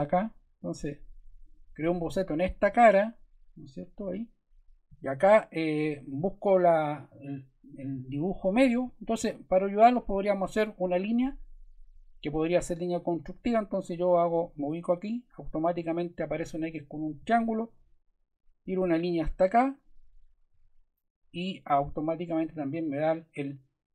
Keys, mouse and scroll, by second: 1.4 click, 2.3 click, 9.7-10.9 drag, 13.1-14.3 drag, 16.9 click, 19.7 click, 20.5 super+z.